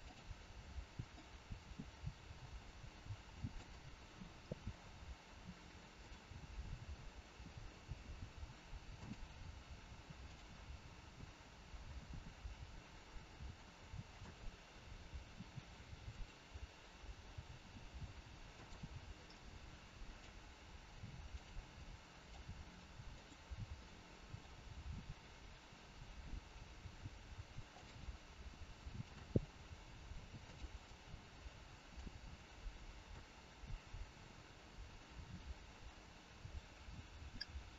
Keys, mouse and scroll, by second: 1.0 click, 2.2 click, 2.2 g, 4.3 scroll up 3, 5.9 click, 6.8-7.3 scroll down 2, 7.3 g, 10.3 click, 11.7 g, 16.2 r, 18.5 g, 19.2 middle click, 22.3 click, 22.3 middle click, 23.0 click, 23.8 middle click, 24.6 g, 28.9 click, 29.7 g, 30.8 middle click, 32.7 middle click.